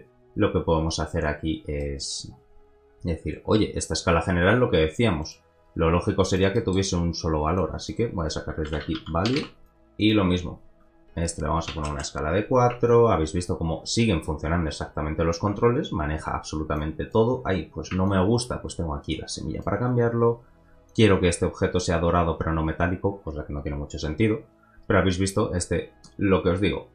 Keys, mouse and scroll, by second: 1.1-1.8 scroll up 1, 1.8 middle click, 2.3-2.8 scroll up 1, 4.8 scroll down 2, 5.2 click, 5.7 g, 6.5-7.5 middle drag, 7.5-9.0 drag, 10.0 click, 10.3 middle click, 10.7-16.5 drag, 16.7-20.3 drag, 20.9 click.